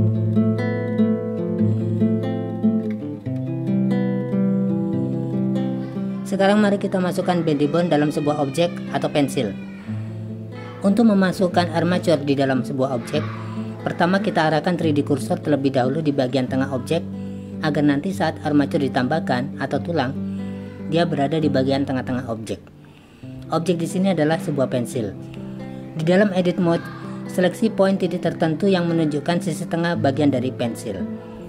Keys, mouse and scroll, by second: 0.3 click, 0.8-2.7 typing, 1.9 drag, 8.1 click, 9.5-10.8 drag, 12.8 click, 14.5 click, 15.6 click, 18.4 click, 21.8 click, 24.8 click, 27.8 click, 29.9 click, 31.3 click.